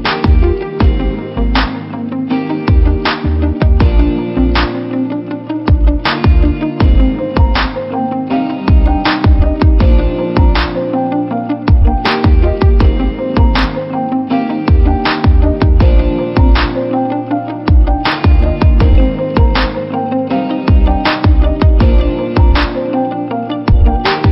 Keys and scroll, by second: 0.4 v, 2.1 ctrl+t, 6.0 Return, 11.1 v, 13.2 ctrl+t, 16.3 Return, 20.6 v, 22.2 ctrl+t.